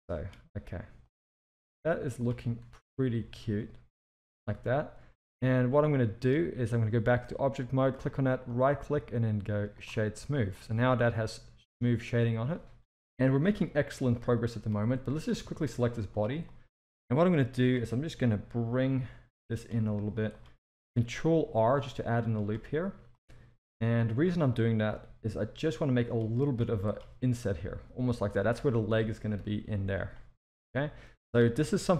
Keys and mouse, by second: 0.0 click, 0.5 g, 1.4 click, 1.8 g, 2.4 z, 3.2 Tab, 4.4 alt+a, 5.1-6.2 middle drag, 7.7 click, 8.6-9.8 right drag, 10.4 middle drag, 10.7 alt+a, 11.0-12.5 middle drag, 13.5 KP_1, 14.3 shift+middle drag, 15.0 click, 15.4 Tab, 15.8 z, 16.4-17.7 drag, 18.7 g, 21.6 ctrl+r, 23.2-24.2 drag, 24.9 g, 26.6 z, 27.5 Tab, 28.0-28.5 middle drag, 29.4 KP_3, 29.6 Tab, 29.9 z, 30.8 click, 31.5 s.